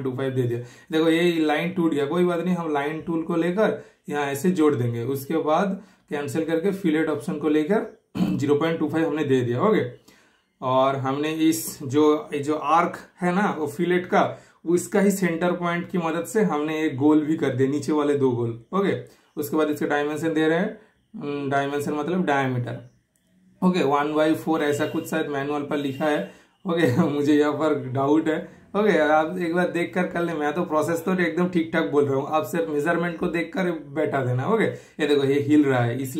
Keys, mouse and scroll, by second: 0.7-2.0 super+middle drag, 2.7-3.8 super+middle drag, 3.8 super+click, 4.7 super+click, 5.4 super+right click, 5.8 super+click, 9.0 super+Return, 16.4 super+right click, 16.9 super+click, 18.2 super+click, 18.8 super+right click, 19.3 super+click, 20.2 typing, 22.6 super+click, 22.6 typing, 26.8 super+Return, 27.4 super+click, 28.4 super+click, 28.9 super+Return, 29.5 super+click, 30.3 super+Return, 31.0 super+click, 31.9 super+Return, 32.7 super+right click, 33.2 super+click, 34.5-36.1 super+drag.